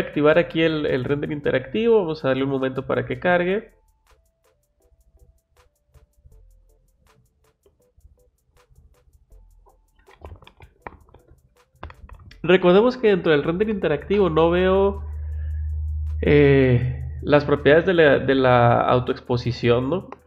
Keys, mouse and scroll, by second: 0.0 click, 1.3 click.